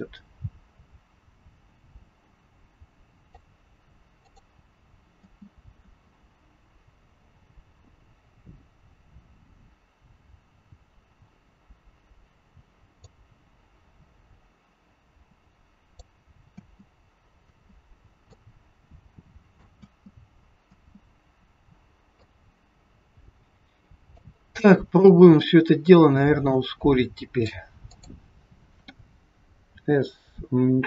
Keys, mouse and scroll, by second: 4.4 click, 5.1 space, 5.8 space, 13.1 click, 16.6 space, 17.4 space, 18.3 click, 19.7 space, 20.7 space, 22.3 click, 25.0 click, 29.7 click, 29.7 s.